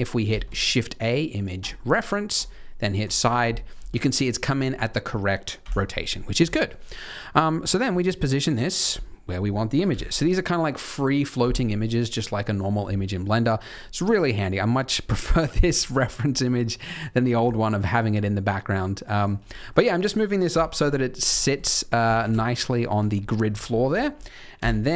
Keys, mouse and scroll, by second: 0.2 shift+a, 3.2 shift+a, 3.7 middle click, 4.0 scroll down 2, 5.5 n, 5.8-6.1 scroll up 3, 6.1 middle click, 6.5 shift+middle click, 7.5 middle click, 7.8 g, 8.9 middle click, 9.8 KP_3, 12.9 scroll up 2, 13.3-14.9 scroll down 1, 14.9 scroll down 1, 15.5 g, 19.4 middle click, 20.4 KP_3, 20.9-21.8 scroll up 8, 21.3 shift+middle click, 23.1 scroll down 2, 23.1 scroll up 6, 23.2-24.2 scroll down 12, 24.5 KP_1.